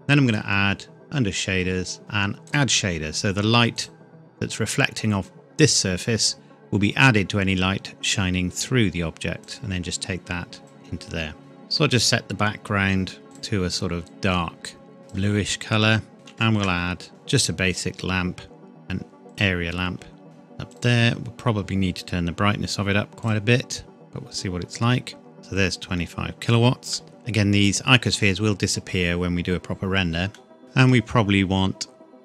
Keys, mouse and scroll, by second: 0.2 click, 2.5 click, 8.5 click, 10.5 scroll down 1, 10.6 click, 11.3 scroll down 1, 13.2 click, 16.1 shift+scroll down 1, 16.2 shift+a, 19.3 click, 22.0-23.2 scroll up 1, 23.2 click, 24.4 scroll up 1, 25.4 KP_Enter, 26.9 middle click, 30.4 middle click.